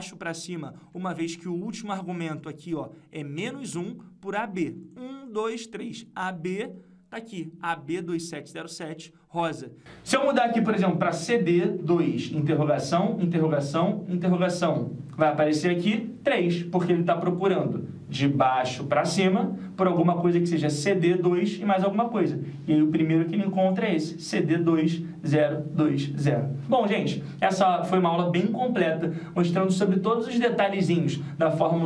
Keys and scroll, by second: 0.8 F2, 12.8 ctrl+alt+w.